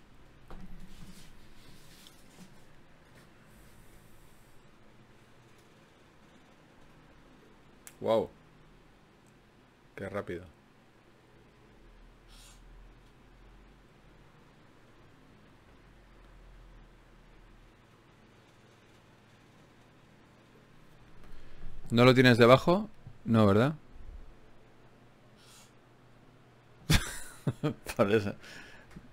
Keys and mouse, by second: 0.0 click, 0.9-3.7 middle drag, 6.6-9.3 middle drag, 9.5-11.6 middle drag.